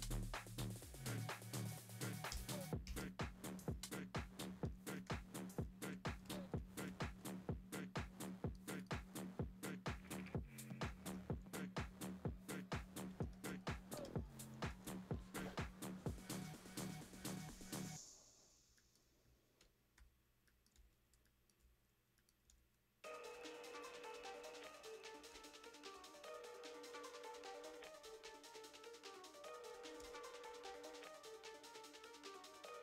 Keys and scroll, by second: 2.3 Return, 2.9 shift+super+}, 4.6 shift+super+r, 4.7-9.1 typing, 10.7-15.3 typing, 16.5 typing, 17.0 alt+space, 18.6 space, 19.6 Escape, 20.0-21.7 typing, 21.6 super+space, 23.3 space, 23.8 space, 24.2 v, 25.3 super+t, 30.0 Return, 30.6 v.